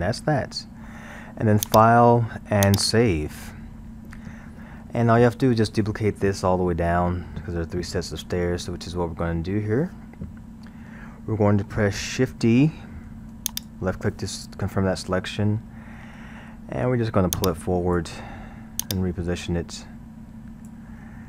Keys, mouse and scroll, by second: 0.0 Tab, 0.6-1.7 middle drag, 1.7-4.5 drag, 4.5-5.9 middle drag, 5.9-8.5 scroll, 8.5-13.1 middle drag, 13.1 shift+d, 15.4-17.4 middle drag, 17.4 click, 21.1-21.2 middle drag.